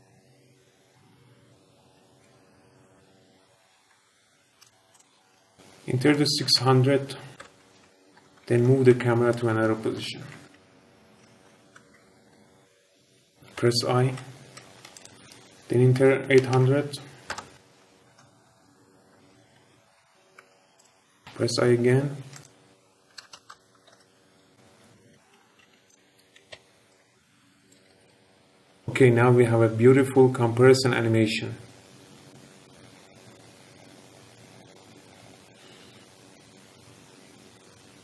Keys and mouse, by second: 2.2 space, 2.9 space, 3.5 space, 5.2 space, 5.5 click, 6.5 KP_0, 8.4 shift+`, 9.0 d, 10.3-13.5 typing, 14.8-17.4 drag, 16.4 KP_0, 18.0-21.2 typing, 20.7 click, 22.2-23.5 drag, 23.1-25.7 typing, 27.8 space, 28.0 space, 28.8 space.